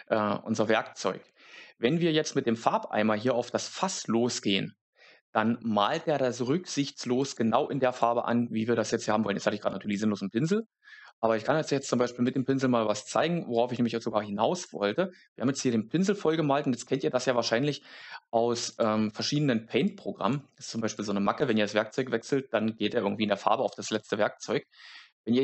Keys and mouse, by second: 7.1 click, 7.8 click, 9.7 click, 12.2 click, 13.0 click, 16.7 click, 18.7 click, 19.8 click, 20.9 click.